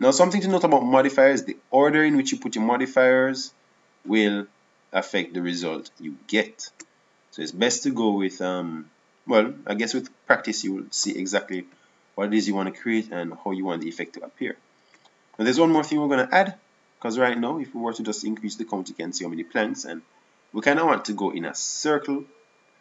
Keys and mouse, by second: 0.9-6.0 middle drag, 18.6-21.6 drag.